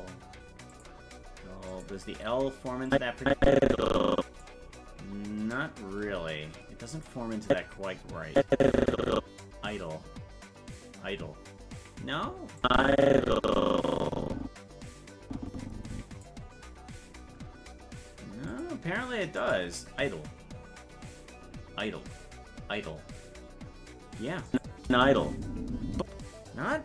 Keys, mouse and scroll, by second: 0.7 click, 1.7 click, 2.9-4.4 drag, 5.4 right click, 6.0 g, 7.5-9.4 drag, 12.6-16.2 drag, 18.5 click, 19.4 click, 24.5 click, 24.8 space.